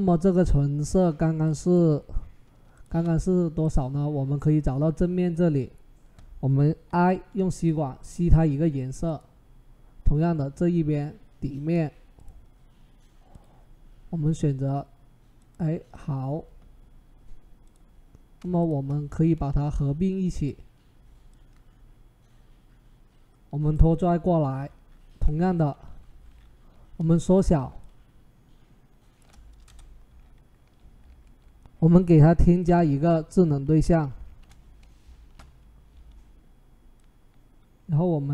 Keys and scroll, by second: 6.7 i, 19.1 ctrl+e, 25.6 ctrl+t, 29.4 Return, 34.0 ctrl+shift+z, 35.0 ctrl+t.